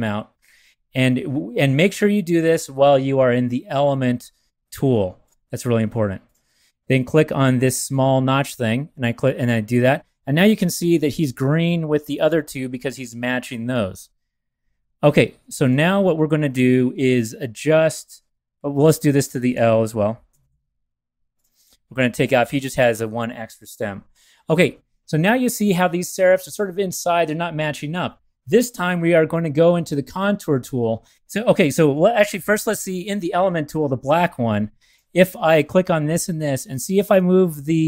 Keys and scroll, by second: 8.0 BackSpace, 20.3 ,, 20.4 ,, 22.4 BackSpace, 32.3 v, 37.1 shift+Left, 37.3 shift+Left, 37.4 shift+Left.